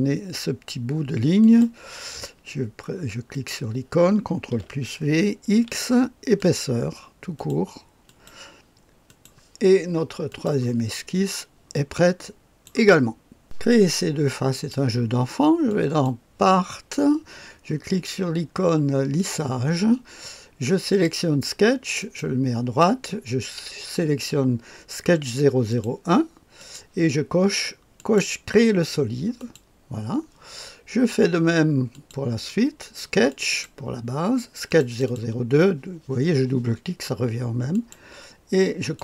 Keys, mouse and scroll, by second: 1.4 click, 3.3 click, 4.5 ctrl+v, 5.5 x, 6.4 click, 7.4 click, 8.1 click, 9.1 click, 10.3 click, 11.8 click, 14.5 click, 15.7 click, 19.2 click, 20.9 click, 22.0 click, 25.7 click, 26.6 click, 28.0 click, 29.4 click, 31.9 click, 33.3 click, 33.5 click, 34.7 click, 34.9 click, 37.7 click, 38.8 click.